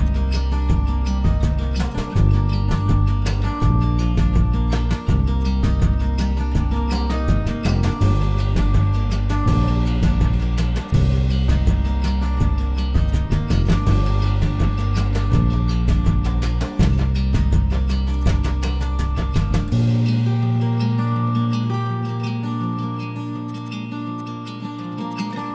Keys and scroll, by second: 1.4 Escape, 2.3 ctrl+g, 4.4 m, 10.4 Escape, 10.8 Escape, 13.5 p, 15.9-17.1 typing.